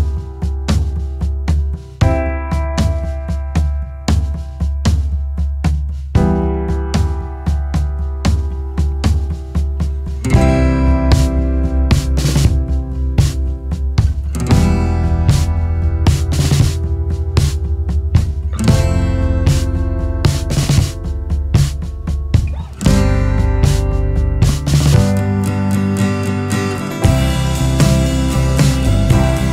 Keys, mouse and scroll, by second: 4.5 click, 12.3 c, 18.8 c, 23.2 c.